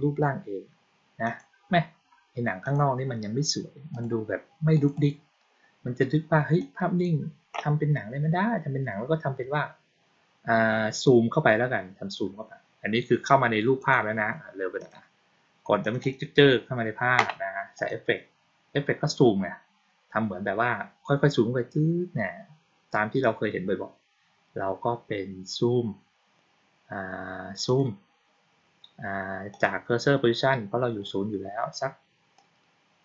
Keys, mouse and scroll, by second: 1.1 click, 2.5 click, 3.8 click, 4.6 click, 4.8 click, 6.5-6.9 drag, 13.7 click, 14.7 click, 15.7 click, 15.9 click, 17.7 click, 27.6 click, 29.4 click, 32.3 click.